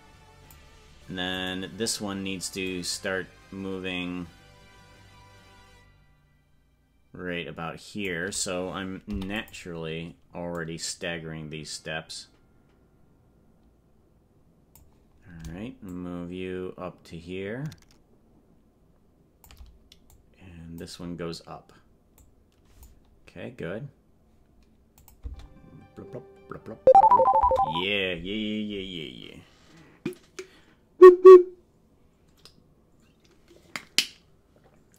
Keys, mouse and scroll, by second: 1.6 right click, 2.7-8.1 drag, 10.6-14.8 drag, 15.8-19.4 shift+drag, 20.2 click, 22.1 click, 25.0 click, 25.2 space.